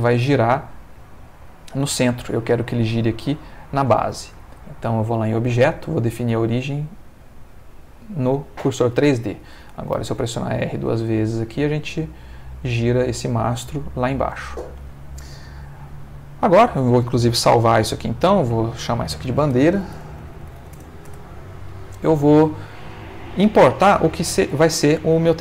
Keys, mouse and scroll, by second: 2.4 Escape, 4.9 click, 7.5 click, 9.1 shift+middle click, 9.9 r, 14.2 Escape, 14.9 shift+middle click, 16.8 ctrl+s, 19.0 click, 19.7-20.6 typing, 20.7 Return, 22.5 click, 24.8 middle click.